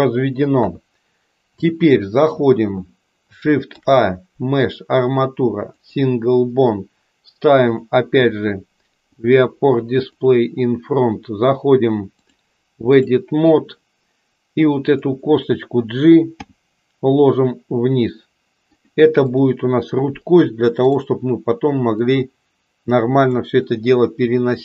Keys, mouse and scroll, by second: 0.6 KP_3, 1.7 shift+middle click, 3.6 shift+a, 7.6 click, 9.0 click, 10.2 click, 12.2-13.2 drag, 16.5 g, 20.8 click, 22.1-23.3 drag.